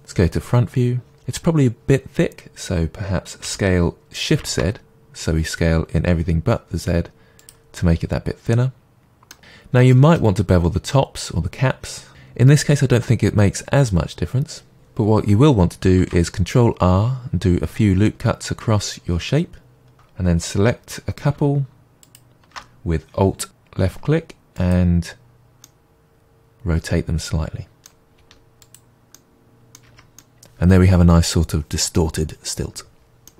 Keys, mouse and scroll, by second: 3.4 s, 7.4 click, 7.8-19.9 middle drag, 9.4-9.9 scroll, 16.0 ctrl+r, 19.9 alt+click, 22.0 alt+shift+click, 23.8 r, 24.7 click, 25.6-28.6 middle drag, 28.2 r, 28.7 click, 29.2 middle click, 29.9 Tab, 30.2-33.3 middle drag.